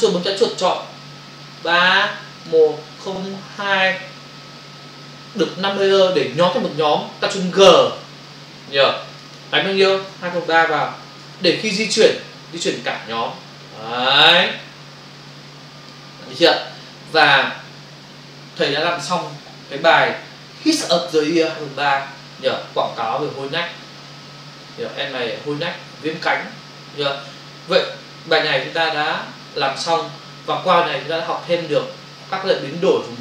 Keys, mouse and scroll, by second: 1.5 ctrl+click, 3.0 ctrl+double click, 3.5 ctrl+click, 9.1 click, 9.2 click, 10.1 2, 11.3 Return, 12.9 click.